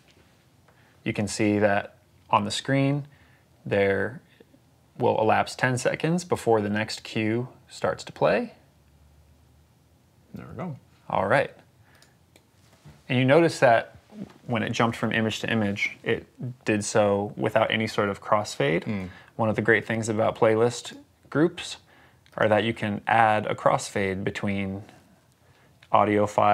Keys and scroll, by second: 12.2 Escape.